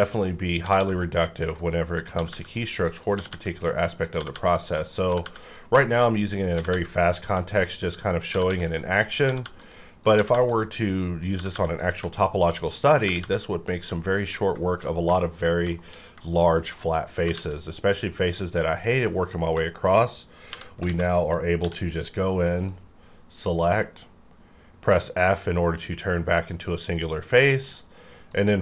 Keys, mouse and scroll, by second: 0.0-0.8 typing, 0.1 click, 1.5 right click, 1.6 right click, 1.9 click, 2.1-5.2 typing, 2.5 click, 4.5 click, 5.4 click, 5.7 scroll down 1, 5.8 shift+middle click, 6.4 click, 6.5 g, 6.7 g, 6.9 click, 7.2 scroll down 1, 7.4 shift+middle click, 8.2 click, 8.2 shift+scroll up 1, 8.2 click, 8.3-10.3 typing, 8.7 click, 9.6 click, 10.5 click, 11.4 g, 11.5 g, 11.7 click, 12.0 shift+middle click, 12.3-12.9 shift+scroll up 1, 12.9 click, 12.9 click, 13.0 g, 13.2 g, 13.4 click, 13.7-14.5 scroll down 3, 14.0 shift+middle click, 14.6 shift+middle click, 14.7-15.6 shift+scroll down 3, 15.2 shift+middle click, 15.7 shift+middle click, 16.1 shift+scroll down 1, 16.4-17.2 shift+scroll up 3, 16.8 shift+middle click, 17.5 alt+a, 19.6 shift+middle click, 20.0 scroll up 1, 20.4 3, 20.9 alt+a, 21.1-21.6 scroll down 1, 21.6 c, 21.7-22.2 scroll down 1, 22.2-22.7 scroll up 1, 22.7-27.7 drag, 27.7-28.3 scroll up 1, 28.3-28.6 drag.